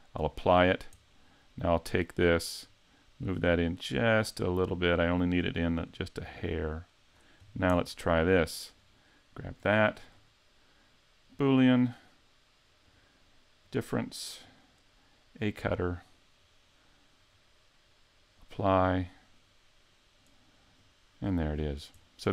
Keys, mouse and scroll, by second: 0.2 click, 0.6-1.2 scroll up 4, 1.2 middle click, 1.6 right click, 2.6 click, 7.4-8.7 scroll up 3, 7.8 middle click, 8.7 right click, 9.6 click, 10.0 click, 12.9 click, 14.5 click, 16.7 middle click, 18.4 click, 19.3 right click, 20.8 click, 21.6 scroll up 4, 22.0 middle click.